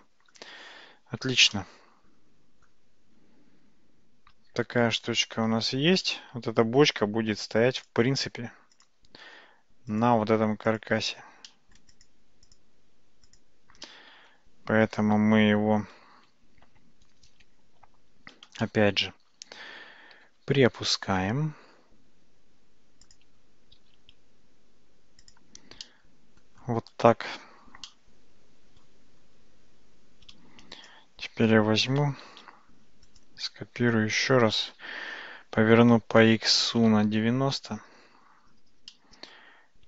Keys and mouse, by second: 1.6-2.7 middle drag, 5.0-5.4 shift+middle drag, 6.0-7.0 middle drag, 7.9 drag, 8.8 click, 9.9 shift+click, 11.6 middle click, 12.0 click, 13.3 shift+click, 13.9 middle click, 15.2 `, 18.6-19.1 shift+middle drag, 20.2 g, 25.8-26.5 middle drag, 27.9 middle click, 30.8 click, 32.3 shift+d, 35.2 r, 39.0-39.4 middle drag.